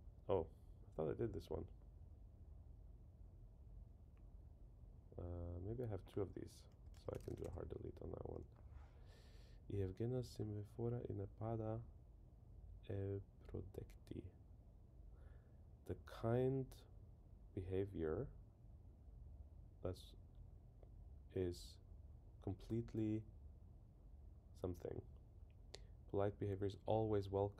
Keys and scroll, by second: 6.9 super+k, 7.7 Return.